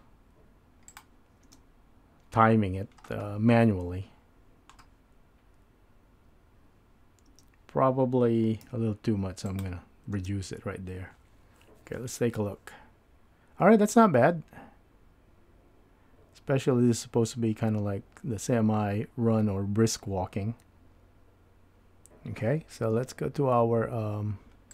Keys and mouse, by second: 1.6 space, 3.8-4.8 middle drag, 7.3 space, 8.6 x, 10.2 space.